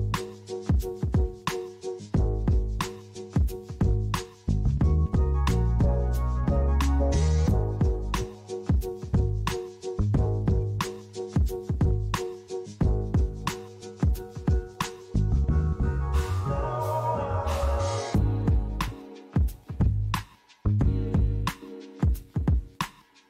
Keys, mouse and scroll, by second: 2.4 click, 4.8 click, 6.7 click, 14.9 click.